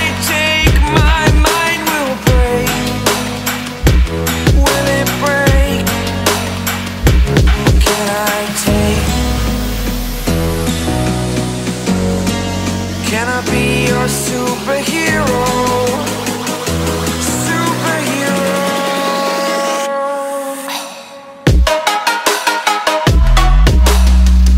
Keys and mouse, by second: 3.2 ], 3.5 ], 5.4 click, 8.4 alt+click, 10.7 click, 14.6 click, 18.3 click, 19.9 b, 20.6 right click, 22.2 click, 23.6 click.